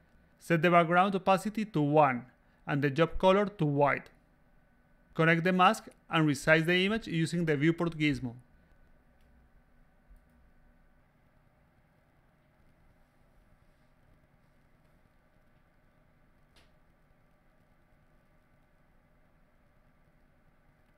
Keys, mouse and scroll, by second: 0.0 click, 0.7-1.2 drag, 2.7 click, 4.1-4.7 drag, 6.4 click, 8.3 click, 8.7 a, 9.4 click, 9.7 click, 11.9 click, 12.2 d, 12.7 click, 13.7 click, 14.7 click, 15.6 a, 16.0 a, 16.1 click, 16.5 click, 16.9 click, 17.2 a, 17.3 click, 17.9 click, 18.8 a, 18.8 click, 19.3 click, 20.0 a, 20.1 click.